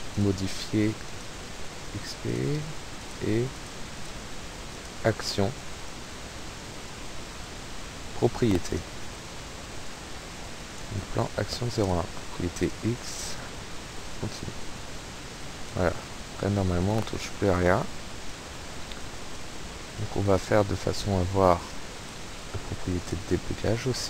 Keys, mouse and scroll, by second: 0.1 click, 1.0 click, 2.1 click, 3.0 click, 3.5 click, 3.8 click, 4.8 click, 5.4 click, 7.2 click, 8.5 click, 9.8 click, 10.6 click, 11.7 click, 12.5 click, 14.8 click, 16.8 click, 17.7 click, 19.4 click, 20.4 click, 22.1 click, 23.1 click.